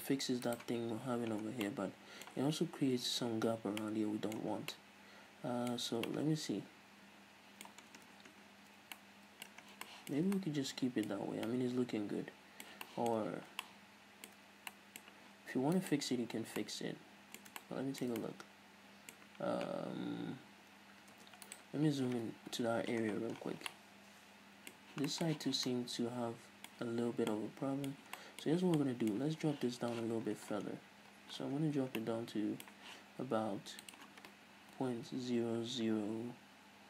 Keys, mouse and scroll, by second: 0.8 right click, 1.7 scroll down 1, 1.9-8.2 middle drag, 4.8 scroll down 2, 6.0 scroll up 2, 8.1-8.9 scroll down 4, 8.2 Tab, 8.9 a, 9.2-9.9 middle drag, 9.9 scroll down 3, 10.1-13.2 shift+middle drag, 11.4-11.7 scroll up 2, 13.4-16.0 middle drag, 13.6 scroll up 2, 16.0 right click, 16.8-21.4 ctrl+middle drag, 20.1-21.4 scroll down 2, 21.4 Tab, 21.7 right click, 22.8 KP_Decimal, 23.3-23.6 scroll down 1, 24.0-28.8 middle drag, 25.0 scroll up 1, 25.6 z, 28.8 z, 28.9-34.1 middle drag, 29.5 Tab, 30.3-31.3 scroll down 2, 31.3-31.9 scroll up 2, 34.1-36.8 drag, 36.1 KP_0.